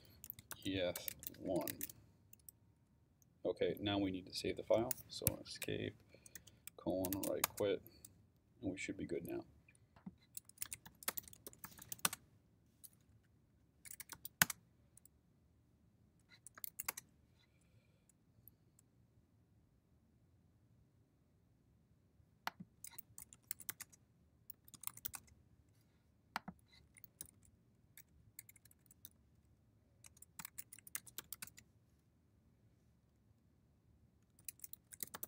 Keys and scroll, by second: 0.0-1.7 typing, 5.5 Escape, 6.4-7.6 typing, 9.9-12.4 typing, 13.1 Up, 13.9 BackSpace, 14.1 t, 14.4 Return, 16.9 Return, 22.8-25.6 typing, 26.8-31.8 typing, 30.1 Return, 34.2-35.2 typing.